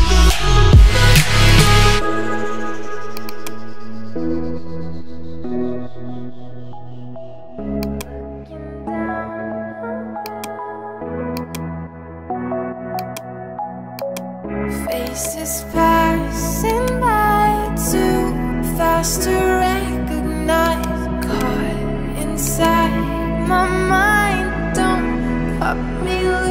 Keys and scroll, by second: 5.1-6.3 typing, 6.5 Return.